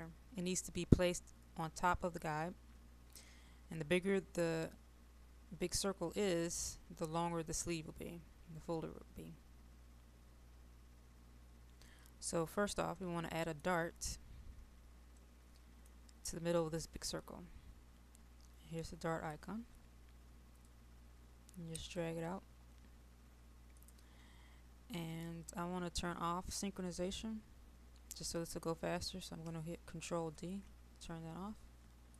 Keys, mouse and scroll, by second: 13.0 middle click, 14.1-15.3 scroll down 1, 15.3-16.6 middle drag, 18.9-22.6 drag, 30.4 ctrl+d.